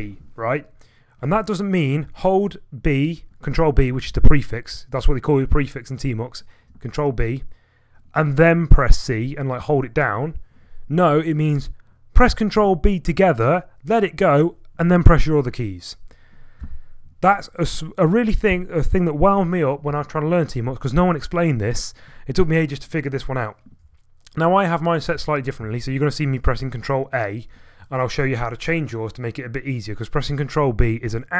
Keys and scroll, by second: 16.6 BackSpace, 16.8 BackSpace, 17.0 BackSpace, 25.2 ctrl+b.